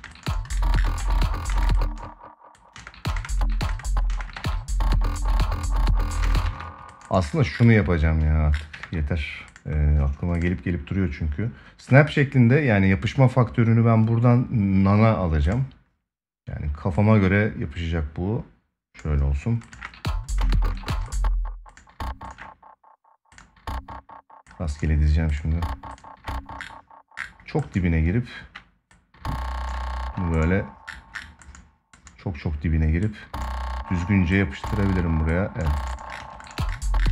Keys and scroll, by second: 0.7 ctrl+s, 1.2 space, 2.5 space, 4.1 ctrl+s, 6.0 space, 6.2 ctrl+s, 8.5 ctrl+s, 19.5 space, 35.9 space, 36.9 ctrl+s.